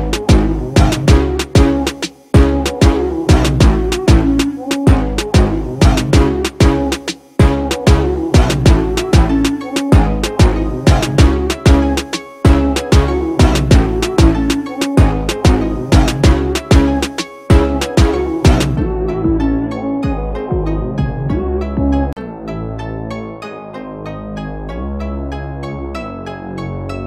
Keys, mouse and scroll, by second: 7.2 alt+shift+click, 22.5 alt+shift+click.